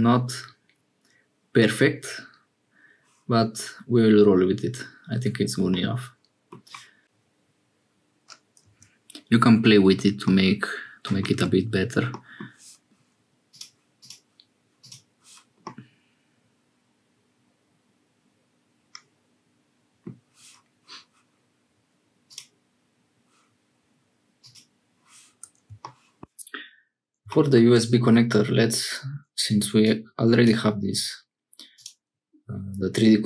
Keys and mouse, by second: 5.7 middle click, 7.0 g, 10.2-11.3 middle drag, 11.4 Tab, 12.1 middle click, 13.5-15.3 drag, 15.7-20.1 middle drag, 22.3 click, 24.4 click, 29.9 click.